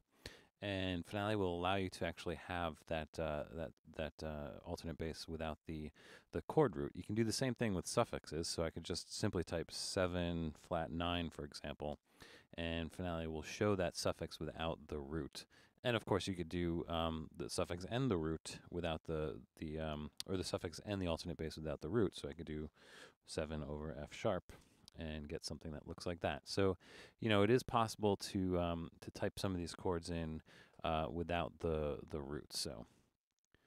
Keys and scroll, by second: 0.0-0.4 typing, 4.2 space, 9.4-12.0 typing, 21.5 7, 23.3-24.6 typing, 30.0 BackSpace.